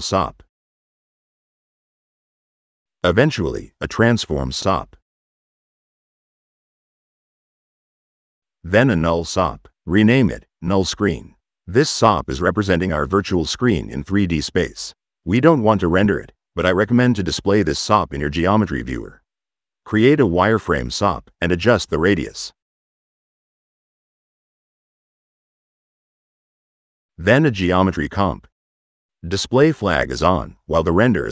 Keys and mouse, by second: 0.1 click, 0.9 click, 2.0 click, 3.7 right click, 4.0-5.6 typing, 6.3 drag, 6.7 middle click, 7.2 click, 8.3 right click, 8.6-9.6 typing, 10.4 click, 11.1 click, 15.5 click, 15.9 c, 19.1 middle click, 19.2 click, 19.8 click, 21.6 click, 22.4 click, 23.1-24.3 middle drag, 26.3-27.2 typing, 27.1 click, 27.6 click, 29.7 click.